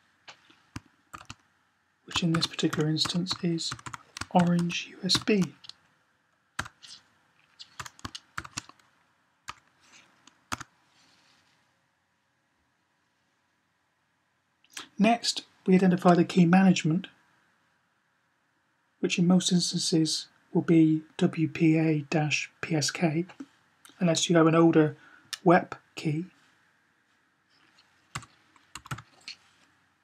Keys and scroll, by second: 2.2-4.9 typing, 6.4 typing, 7.6-8.1 typing, 27.9-28.8 typing.